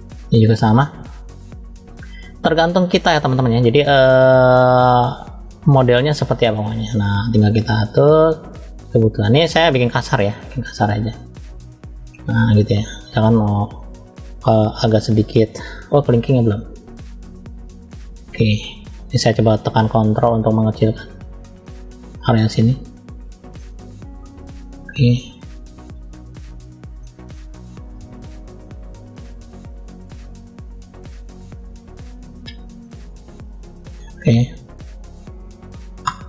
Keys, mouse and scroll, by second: 0.1 middle click, 1.0 middle click, 2.2 middle click, 2.9 shift+middle click, 3.7 middle click, 4.5-5.6 drag, 7.3 middle click, 8.4 click, 9.8 click, 10.0 click, 10.6 scroll down 1, 11.1 middle click, 12.1 scroll down 1, 12.6 middle click, 16.4 shift+middle click, 17.2-17.5 scroll up 2, 19.5 scroll up 1, 20.0 ctrl+click, 23.5 middle click, 24.4 ctrl+click, 26.5-26.9 scroll down 1, 26.9 middle click, 28.2 ctrl+click, 28.6 ctrl+click, 29.1 ctrl+click, 29.4 ctrl+click, 29.8 ctrl+click, 30.0 ctrl+click, 30.8 ctrl+click, 31.3 ctrl+click, 31.7 ctrl+click, 32.0 ctrl+click, 32.1 ctrl+click, 32.8 ctrl+click.